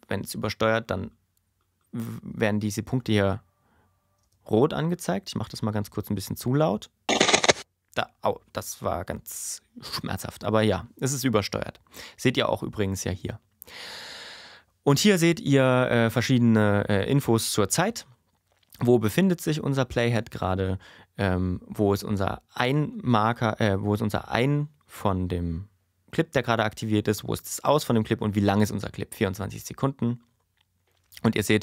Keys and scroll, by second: 2.9 space, 4.2 space, 7.1 space.